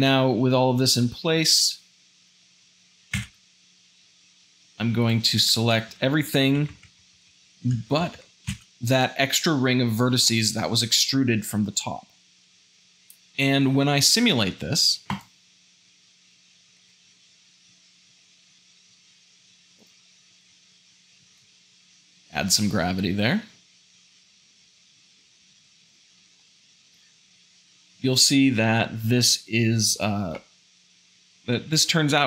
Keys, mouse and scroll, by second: 1.0 Tab, 3.9 a, 5.0 alt+click, 16.4 shift+Left, 16.8 space, 24.7 `, 25.9 space, 26.2 shift+middle click, 26.7 shift+z.